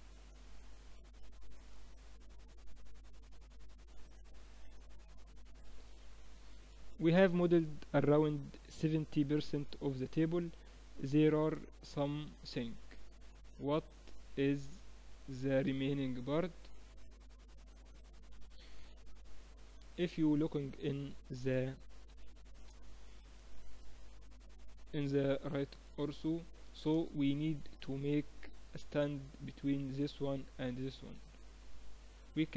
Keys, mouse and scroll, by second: 5.7 ctrl+s, 9.4-17.0 middle drag, 18.0 KP_1, 19.5 KP_3, 20.3-22.7 middle drag, 24.7-29.7 middle drag, 29.7-31.9 right drag, 31.1 Tab, 32.0 right click, 32.2 middle click.